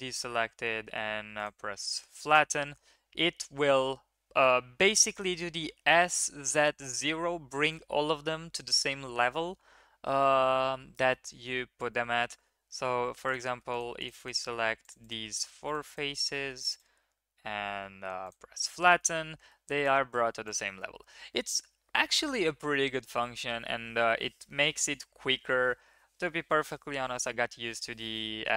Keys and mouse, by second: 2.3 middle drag, 11.0-12.1 drag, 12.9 3, 13.2 click, 13.6 shift+click, 14.0 shift+click, 14.8 shift+drag, 15.0 shift+drag, 15.6 shift+click, 16.3 drag, 16.6-18.2 drag, 18.9-19.5 middle drag, 20.4 click.